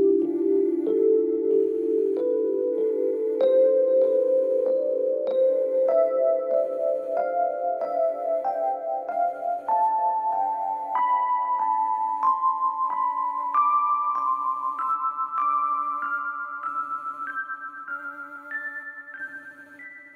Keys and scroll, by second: 7.8 Escape, 11.5 F1, 15.5 ctrl+z.